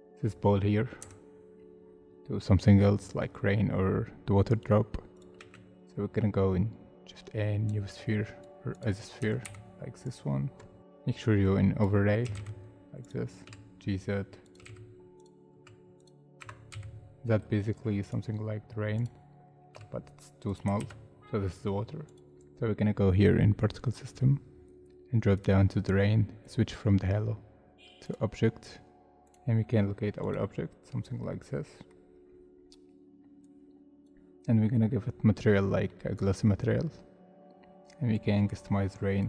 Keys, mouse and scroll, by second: 0.7 scroll down 1, 1.5 scroll down 1, 1.7 scroll up 1, 5.4 shift+a, 9.2 g, 9.4 y, 10.8 z, 12.2 g, 12.3 z, 13.4 s, 14.6 g, 14.6 z, 15.6 s, 16.4 Tab, 16.8 z, 17.3 middle click, 18.0 right click, 19.7 s, 20.8 ctrl+z, 24.6 scroll down 1, 31.2 middle click, 32.2 scroll down 1, 32.5-33.5 scroll up 1, 34.6 middle click, 36.7 scroll up 1.